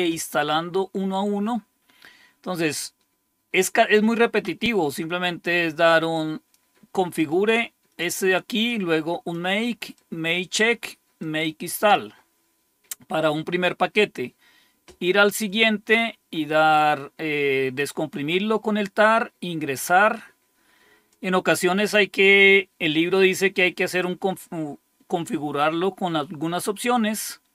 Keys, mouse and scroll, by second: 1.9-2.8 scroll up 1, 6.1 click, 7.2-11.9 drag, 15.9-17.8 drag, 19.0 click, 21.1-23.7 drag.